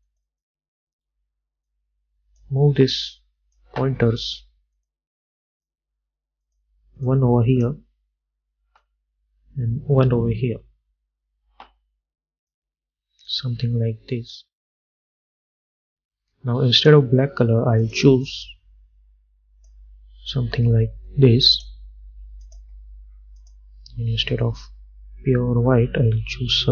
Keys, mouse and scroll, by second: 0.2-26.7 drag.